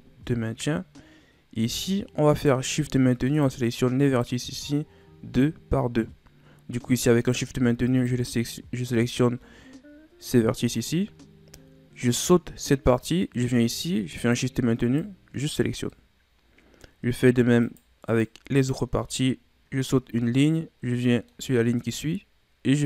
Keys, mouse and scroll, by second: 2.3 right click, 3.3 shift+right click, 4.0 shift+right click, 7.2 right click, 7.9 shift+right click, 8.9 shift+right click, 10.9-13.9 middle drag, 14.2 shift+right click, 14.8 shift+right click, 15.4 shift+right click, 15.9-17.6 middle drag, 17.6 shift+right click, 18.1 shift+right click, 18.6 shift+right click, 21.0-22.8 middle drag.